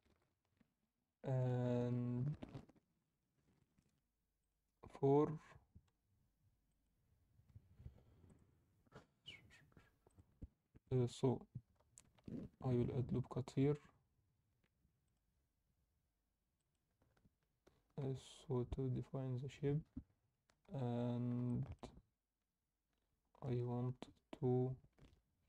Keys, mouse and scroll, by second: 2.9 Tab, 4.4-7.0 drag, 8.2-11.3 drag, 12.2 ctrl+r, 17.6 scroll down 2, 18.1 Tab, 20.2 scroll up 2, 20.3 middle click, 20.8 Tab, 21.4 alt+shift+middle click.